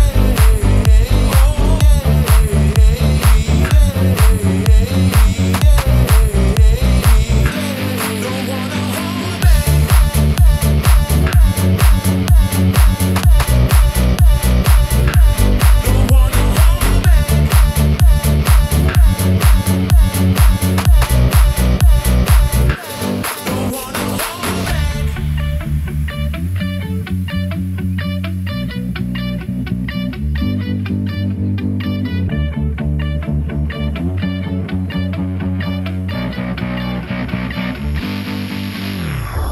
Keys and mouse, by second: 0.8 alt+shift+click, 1.5 s, 3.1-5.0 drag, 5.0 middle click, 6.7 ctrl+z, 8.3 ctrl+b, 13.8-16.2 middle drag, 16.6 Tab, 17.2-17.8 drag, 17.8-18.2 middle drag, 18.3 Tab, 18.8 ctrl+click, 19.7-20.8 drag, 21.3 click, 23.4 shift+middle click, 24.1 1, 24.9-26.0 drag, 27.6 s, 34.0 shift+middle click, 35.1 shift+middle click, 36.4-37.4 drag, 38.4 s.